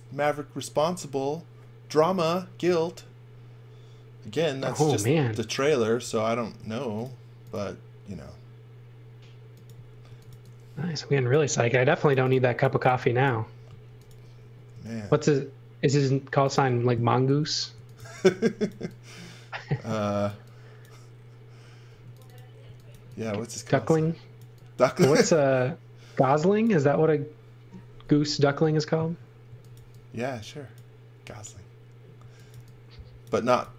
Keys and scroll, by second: 6.0 s, 9.8-13.8 typing, 17.4-18.4 typing, 21.9-23.4 typing, 29.4 x, 29.7 v, 32.2 x, 32.5 v, 33.3 x, 33.6 v.